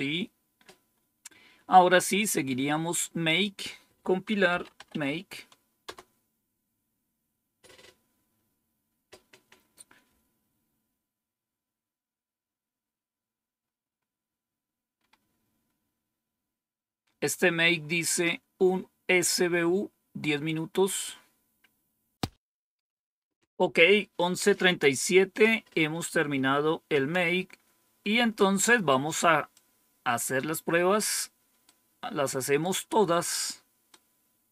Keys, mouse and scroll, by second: 3.2 click, 4.2-5.3 typing, 5.7 Return, 13.5-20.1 scroll up 1, 20.1-21.4 scroll down 1, 21.4-22.0 scroll down 1, 22.0 scroll down 1, 25.2 click, 26.1 Home, 26.8 End, 29.4-31.1 drag, 31.6 click, 32.5 right click, 33.8-34.5 right drag.